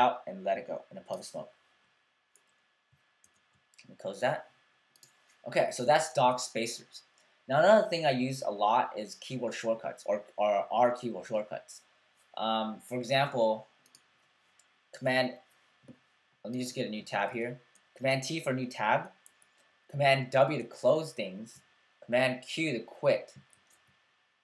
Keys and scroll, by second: 3.3 super+q, 6.3 super+w, 17.3 super+t, 20.5 super+w, 23.5 super+q.